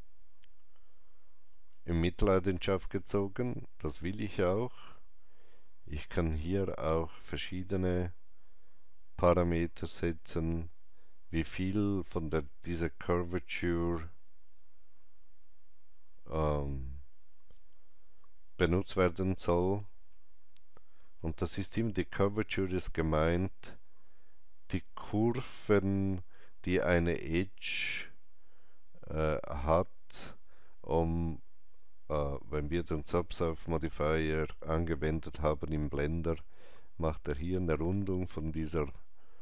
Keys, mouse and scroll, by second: 1.3 scroll down 1, 3.3-5.1 scroll up 1, 9.5-18.8 drag, 9.5 scroll up 1, 18.8-27.9 alt+drag, 20.0 alt+middle click, 22.3 alt+right click.